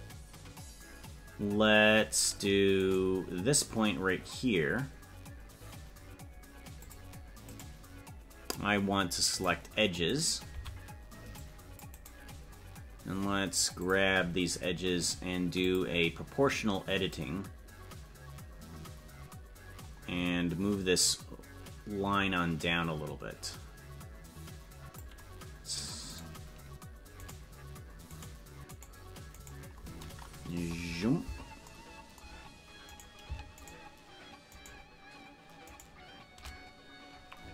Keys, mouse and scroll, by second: 2.8 right click, 6.8 click, 7.5-9.3 right drag, 9.3 click, 10.1 right click, 10.5 c, 13.8 click, 15.6 click, 17.1-25.0 drag, 26.1 right click, 30.8 KP_Decimal, 32.9-37.3 right drag, 37.3-37.5 scroll down 11.